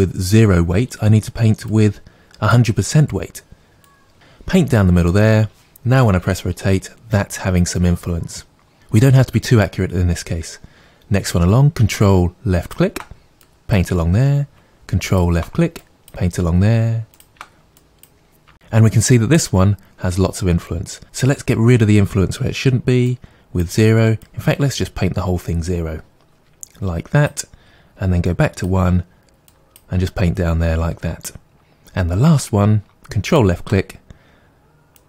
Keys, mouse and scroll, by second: 1.7-8.7 drag, 6.2 r, 8.7 right click, 12.6 ctrl+click, 13.4-15.3 drag, 15.7-20.2 drag, 23.1-35.0 drag.